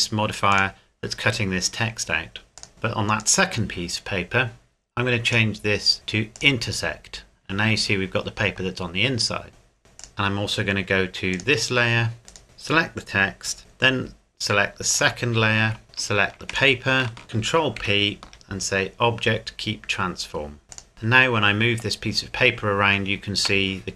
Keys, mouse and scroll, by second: 9.5 right click, 10.0 click, 10.1 scroll up 1, 11.3-12.1 scroll up 1, 12.1 click, 12.3 right click, 14.9 shift+click, 16.5 shift+right click, 17.8 ctrl+p, 20.7 click, 20.9 g, 23.4 Escape.